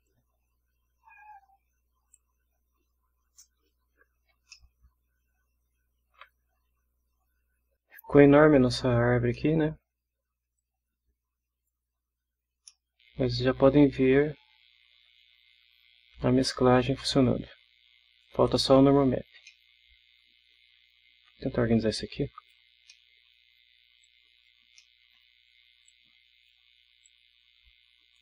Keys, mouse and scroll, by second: 0.0-2.3 drag, 4.5-6.3 ctrl+middle drag, 9.3-9.8 middle drag, 9.8 scroll up 1, 10.6-11.9 drag, 12.7-15.2 middle drag, 17.1-18.4 drag, 19.5-20.9 middle drag, 22.0 click, 22.9 middle click, 24.0-24.6 drag, 24.8-25.3 middle drag, 25.9-26.7 drag, 27.0-28.2 drag.